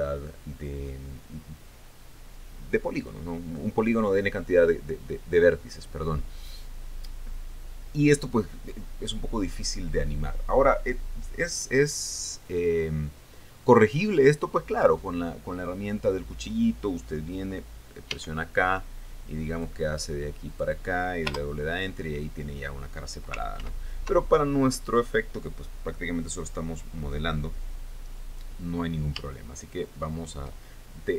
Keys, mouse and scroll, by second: 18.7 k, 20.1 click, 21.1 click, 21.9 Return, 24.2 ctrl+z.